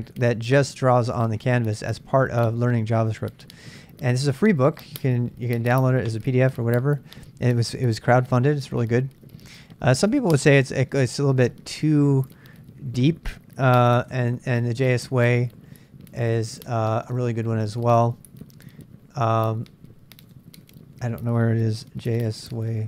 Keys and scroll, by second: 13.9-17.2 typing, 21.9-22.8 typing.